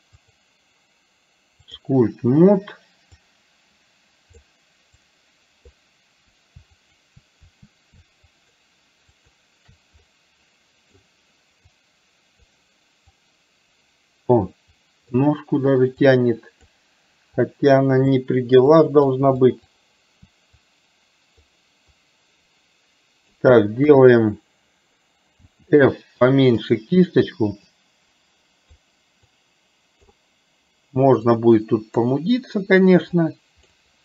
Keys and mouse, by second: 0.2-2.0 drag, 3.2-4.5 drag, 5.0 click, 6.9 click, 8.4 shift+click, 9.2 shift+click, 10.1 middle click, 11.7 click, 13.2-15.2 drag, 16.1 click, 17.5 click, 18.7 click, 19.5 click, 20.7 click, 22.0-23.4 drag, 27.7-28.9 drag, 29.4 click, 31.4 click, 33.1 click.